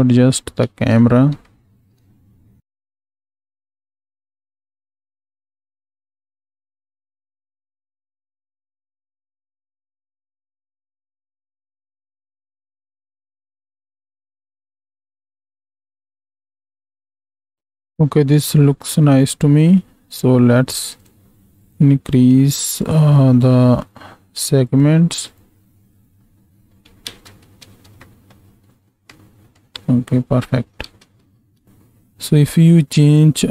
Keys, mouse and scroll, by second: 0.6 ctrl+space, 1.4-2.0 shift+drag, 2.6 n, 2.9-4.1 shift+drag, 4.2 shift+click, 4.5 click, 5.1 shift+Left, 5.2 space, 7.2 space, 7.3-7.9 drag, 8.2 shift+Left, 8.4 space, 8.8 shift+click, 8.8 space, 9.1 click, 9.7 space, 11.2 space, 11.3 x, 11.6 z, 12.4 g, 13.4 click, 13.4 z, 13.6 shift+Left, 13.8 space, 15.9 space, 16.3 n, 17.4 ctrl+space, 21.7-22.6 drag, 22.8 click, 25.2 click, 27.0 ctrl+space, 28.0 shift+middle click, 29.1 shift+click, 30.9 ctrl+space, 32.9-33.5 drag.